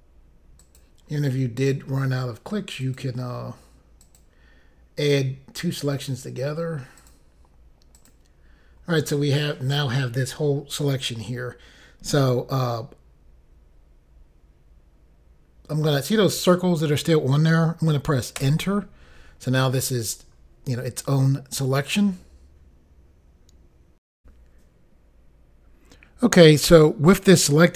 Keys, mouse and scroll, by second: 0.7 click, 2.9 click, 4.1 click, 7.1 click, 8.0 click, 18.5 Return, 24.1 Insert, 24.2 Pause.